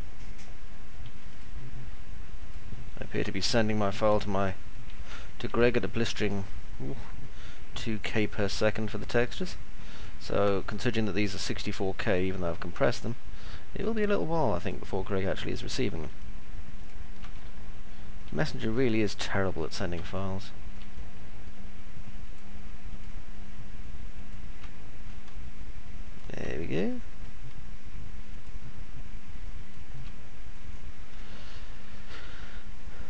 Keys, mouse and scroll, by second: 0.0-1.2 alt+middle drag, 2.3 ctrl+click, 4.2 alt+middle click, 5.2-6.2 alt+middle drag, 6.2 ctrl+click, 8.0 ctrl+click, 10.5-11.5 alt+middle drag, 12.3 middle click, 14.5 ctrl+click, 16.8 ctrl+click, 17.3 alt+middle click, 18.8 middle click, 20.2 alt+middle click, 21.0 middle click, 22.2 ctrl+click, 24.2 ctrl+click, 24.5 middle click, 26.0 ctrl+click, 26.3 middle click, 27.0 middle click, 29.5 ctrl+click, 30.0 middle click, 31.0-32.2 alt+middle drag, 32.3 middle click.